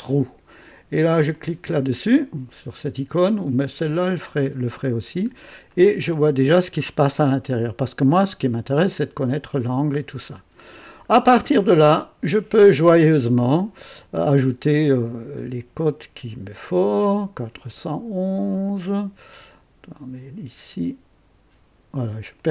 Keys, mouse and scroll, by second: 1.3 click, 4.9-5.4 scroll up 3, 5.7-6.4 right drag, 6.7-7.3 scroll up 1, 10.1-10.8 right drag, 14.8 click, 15.9 click, 17.0-17.9 drag, 18.9 click, 19.3-20.5 right drag, 22.3 click.